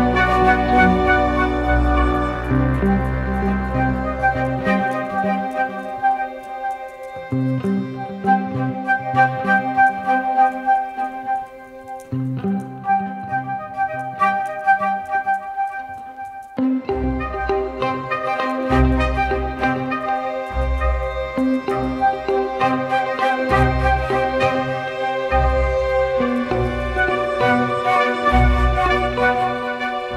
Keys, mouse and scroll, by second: 11.4 alt+click, 19.0-19.8 typing, 20.6 ctrl+=, 20.8 ctrl+=, 21.4-23.0 typing, 28.5 typing.